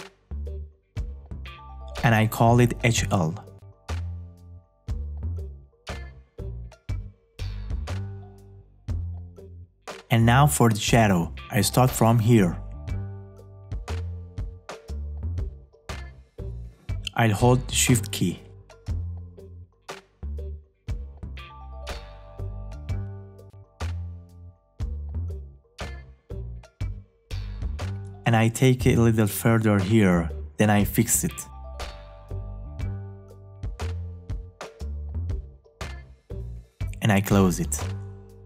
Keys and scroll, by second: 28.4 space.